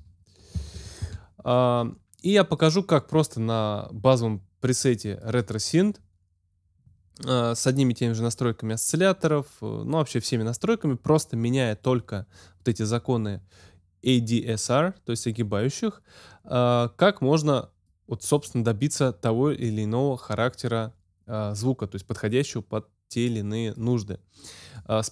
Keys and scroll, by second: 0.0-1.2 typing.